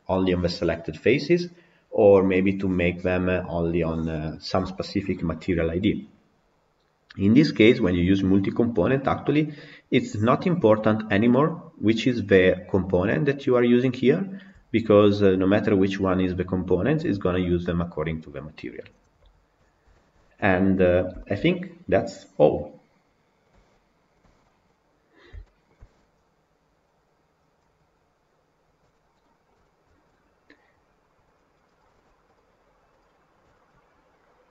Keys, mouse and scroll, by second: 19.5 scroll down 8, 19.8-25.7 shift+middle drag, 25.7 scroll up 1, 31.7 click, 32.3 click, 32.9 click, 33.4 click.